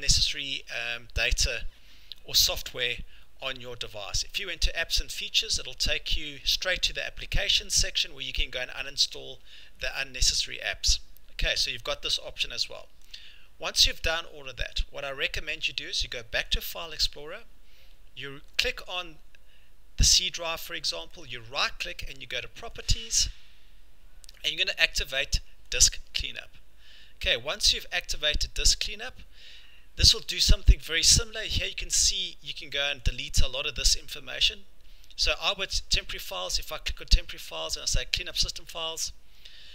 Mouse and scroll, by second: 2.8 click, 4.6 click, 7.1-7.4 scroll, 8.9 scroll, 10.1-11.1 scroll, 12.1 scroll, 13.1 click, 14.8 click, 16.6 click, 18.6 click, 21.2 right click, 22.9 click, 25.8 click, 31.5 click, 32.8 click, 33.1 click, 33.5 scroll, 34.8-36.2 scroll, 36.2-36.5 scroll, 37.9 click.